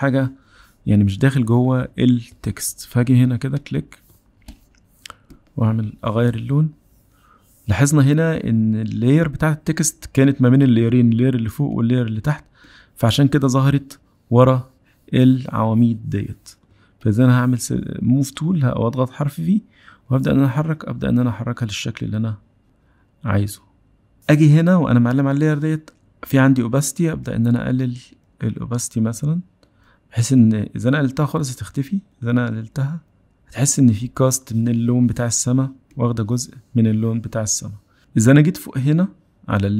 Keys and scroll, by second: 16.7 v.